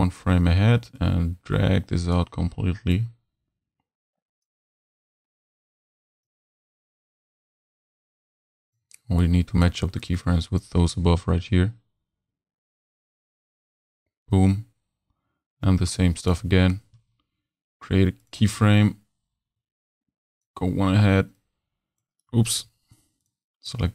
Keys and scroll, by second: 22.5 super+z.